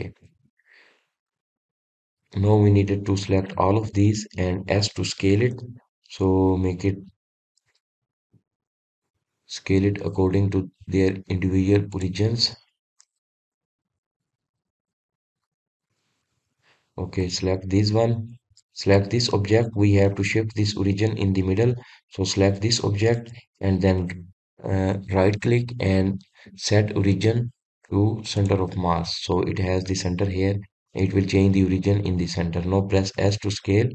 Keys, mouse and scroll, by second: 0.9 scroll up 2, 1.5-3.3 middle drag, 3.3-3.9 scroll down 3, 3.9 drag, 5.1-6.5 middle drag, 6.5 s, 10.2-13.2 drag, 17.0-17.5 middle drag, 17.5 click, 18.3 click, 20.0 click, 20.4-23.1 middle drag, 23.1 click, 24.9-33.9 right drag.